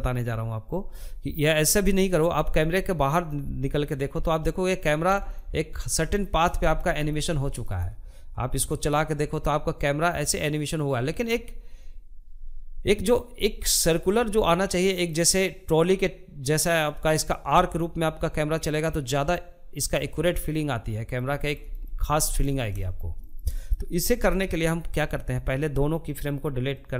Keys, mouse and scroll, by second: 1.5 click, 2.3-3.5 middle drag, 3.5-3.8 scroll down 1, 3.8-7.1 shift+middle drag, 7.1-12.8 drag, 12.8-20.4 middle drag, 20.4 scroll up 1, 20.7-25.1 shift+middle drag, 25.1-26.9 drag.